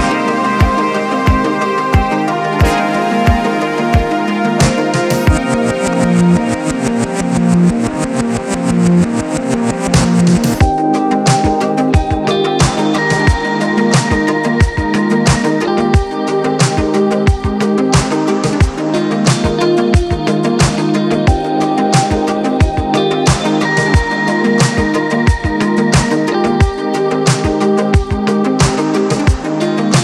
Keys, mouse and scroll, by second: 0.9 shift+click, 1.6 shift+click, 2.6 shift+click, 3.5 shift+click, 4.3 shift+click, 5.1 shift+click, 5.9 shift+click, 6.7 shift+click, 8.0 ctrl+shift+b, 14.2-16.3 middle drag, 16.3 g, 20.5 middle click, 20.9-21.4 scroll up 1, 21.4-23.2 shift+middle drag, 23.2 click, 24.3-25.7 drag, 25.7 e.